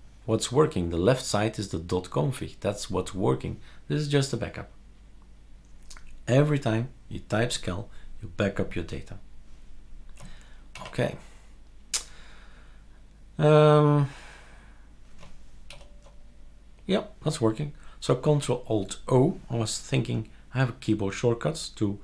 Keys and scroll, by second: 10.7 super+q, 15.7 ctrl+alt+o.